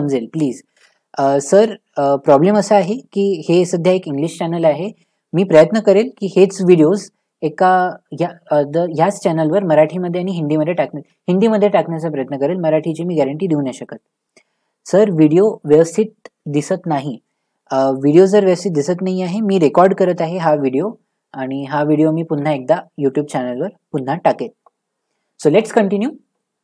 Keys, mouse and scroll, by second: 13.7-17.1 scroll, 26.1-26.6 scroll.